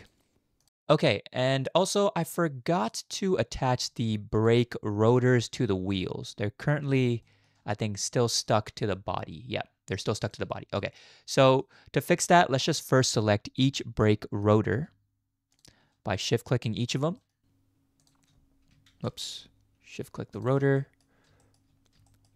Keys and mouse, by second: 0.6 click, 1.9-2.9 middle drag, 3.9 shift+middle click, 5.6-5.9 drag, 6.6 click, 7.3 shift+middle click, 8.8 g, 10.6 ctrl+z, 11.4 shift+click, 13.0 click, 14.0 shift+middle click, 16.3 middle click, 17.2 shift+middle click, 18.0 shift+click, 18.9 ctrl+z, 20.8 middle drag, 21.4 shift+middle click, 22.1 shift+middle click.